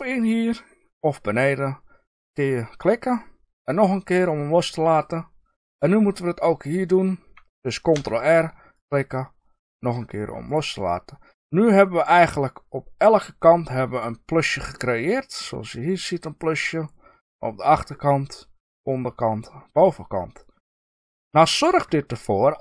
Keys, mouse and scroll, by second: 3.7 click, 5.6 click, 7.8 ctrl+r, 9.7 click, 10.4 click, 10.8-22.6 middle drag.